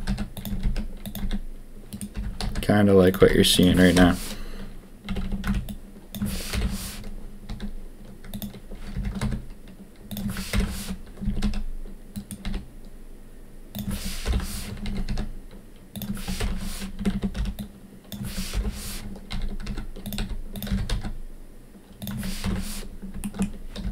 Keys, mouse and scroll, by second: 0.0-2.1 typing, 3.1 s, 3.9 ctrl+KP_3, 5.0 a, 5.2 a, 5.4 b, 6.5 ctrl+KP_1, 7.4 s, 8.9 g, 10.5 ctrl+KP_3, 11.2 s, 12.4 s, 14.2 ctrl+KP_1, 14.8 s, 16.3 ctrl+KP_3, 16.9 a, 17.2 a, 17.3 b, 18.5 ctrl+KP_1, 19.2 s, 20.1 s, 20.6 g, 22.4 ctrl+KP_3, 23.3 shift+middle click, 23.8 g.